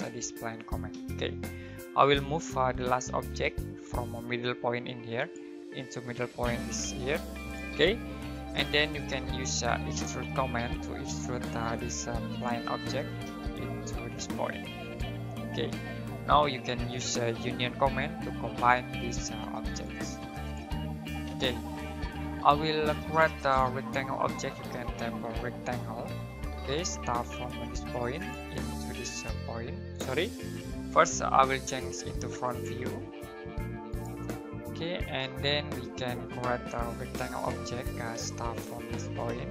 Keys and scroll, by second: 0.0-3.4 typing, 9.0-11.1 typing, 17.3-18.9 typing, 24.5-26.5 typing, 30.4 Escape, 36.7-38.1 typing.